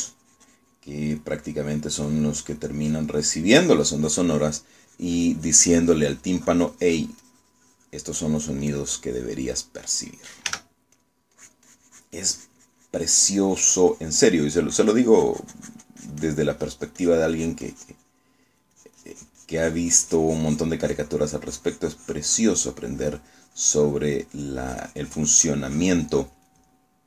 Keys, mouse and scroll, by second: 0.0 s, 0.6-2.4 drag, 2.6 click, 3.2 click, 3.6 click, 4.8-9.7 drag, 9.8 click, 11.6 f, 12.0 click, 12.4-21.9 drag.